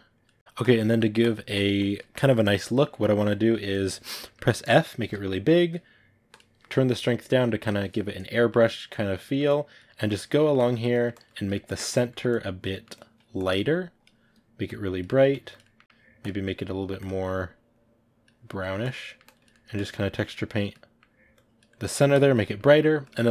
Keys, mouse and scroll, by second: 0.3 middle click, 0.4 click, 0.7 middle click, 1.1 click, 1.9-4.9 ctrl+middle drag, 4.9 f, 6.9-8.4 drag, 8.4 middle click, 8.9 click, 9.1 middle click, 9.4 click, 9.7 middle click, 10.0 click, 10.3 middle click, 10.5 click, 10.8 middle click, 11.0 click, 11.5 middle click, 11.7 click, 12.0 middle click, 12.4 click, 12.6 middle click, 12.9 click, 14.9 middle click, 15.2 click, 15.5 middle click, 15.8 click, 17.6 click, 18.5 middle click, 18.7 click, 18.9 middle click, 19.2 click, 19.4 middle click, 19.7 click, 20.0 middle click, 20.3 click, 20.6 middle click, 21.3 click, 21.6 middle click, 22.0 click, 22.3-23.3 middle drag.